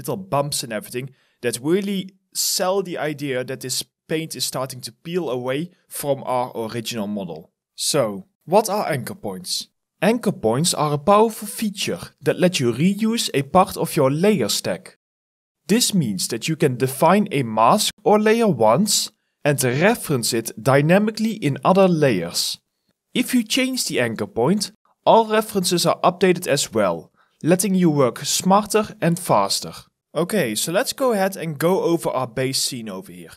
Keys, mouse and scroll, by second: 4.4 alt+right click, 5.6 alt+click, 6.3 alt+middle click, 6.8 alt+right click, 7.3 alt+click, 32.8 alt+click.